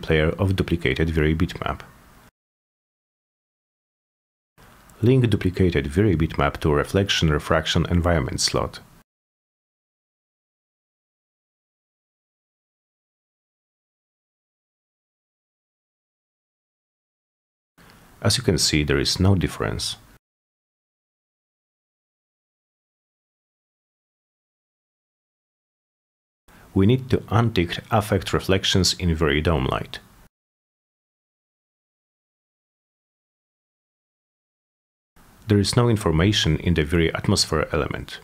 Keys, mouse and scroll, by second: 0.8 click, 1.5 4, 1.9 Return, 3.2 click, 4.0 click, 4.8 F10, 7.1 click, 7.8 click, 8.8 click, 10.0 click, 11.0 click, 12.4 click, 14.2 click, 16.3 click, 20.4 click, 21.1-23.1 drag, 24.0 click, 25.6-26.4 drag, 27.1 click, 29.5 click, 30.6-31.1 drag, 34.0 click, 35.3 click, 38.0 click.